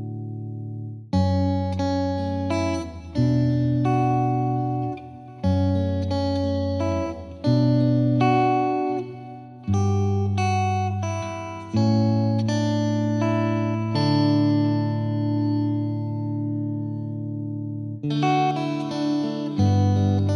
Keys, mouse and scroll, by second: 3.3-6.1 drag, 12.5-14.1 drag, 14.1-16.7 middle drag, 16.7-17.7 drag, 17.7 space.